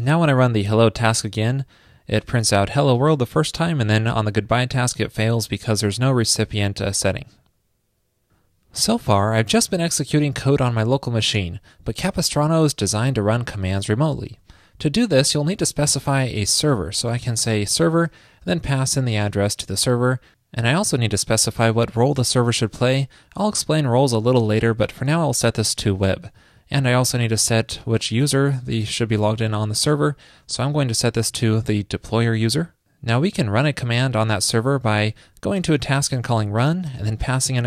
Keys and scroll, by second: 10.6 super+/, 13.4 super+Left, 18.9 super+v.